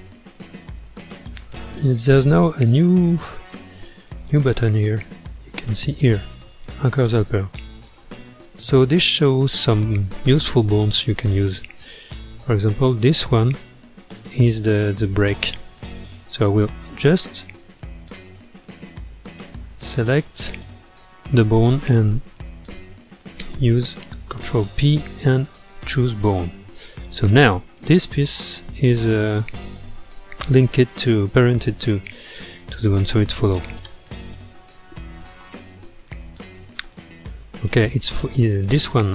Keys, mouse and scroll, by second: 0.4 click, 3.4 click, 7.7 click, 9.6-12.7 middle drag, 13.1 click, 16.3 click, 18.2 shift+click, 19.7 ctrl+Tab, 20.0 click, 24.0 ctrl+p, 27.6 ctrl+Tab, 28.0 click, 30.0-30.9 scroll down 7, 30.9-32.3 middle drag, 32.3 space, 33.9 space, 35.0-36.1 drag, 36.1-36.9 middle drag, 36.9-37.4 scroll up 1, 37.4-38.2 middle drag, 38.2 scroll up 1, 38.7-39.1 middle drag.